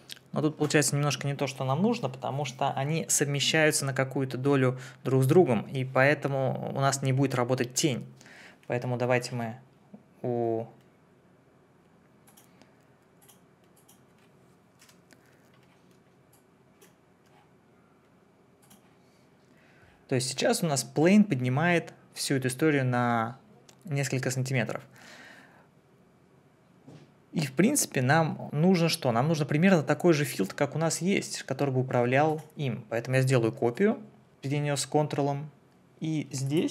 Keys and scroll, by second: 14.8 Delete.